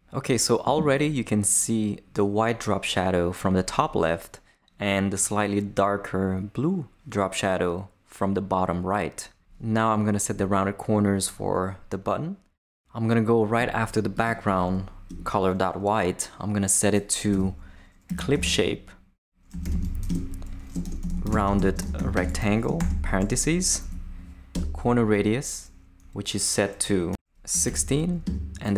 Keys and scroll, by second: 15.1 Return, 17.3-22.8 typing, 22.7 shift+Return, 23.8 shift+Down, 24.5 Return, 27.3-28.7 typing, 28.2 Tab.